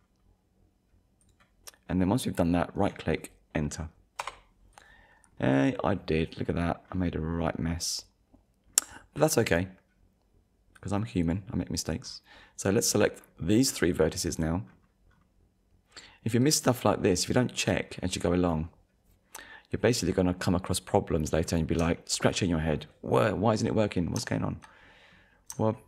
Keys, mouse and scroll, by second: 1.2 click, 2.8 right click, 4.2 Return, 4.7 click, 5.3 scroll up 1, 5.9-6.2 scroll up 1, 6.4 scroll up 1, 6.9-7.6 scroll down 2, 8.3 scroll up 1, 10.8 click, 12.0-12.5 scroll down 1, 12.8-13.2 scroll up 1, 14.0 scroll down 1, 15.1-15.5 scroll down 1, 16.0-16.4 scroll down 1, 16.6 click, 16.9-17.4 scroll up 1, 18.5 scroll up 1, 20.1-20.5 scroll down 1, 21.4-21.8 scroll down 1, 22.0 shift+middle click, 24.3 shift+middle click, 24.8-25.7 scroll up 3, 25.7 shift+middle click.